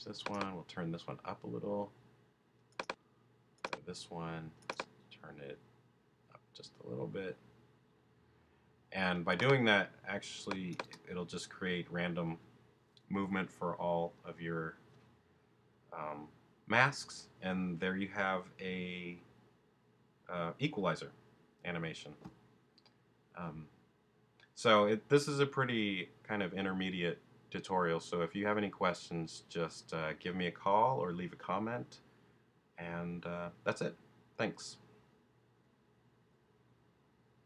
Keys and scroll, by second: 10.8 space.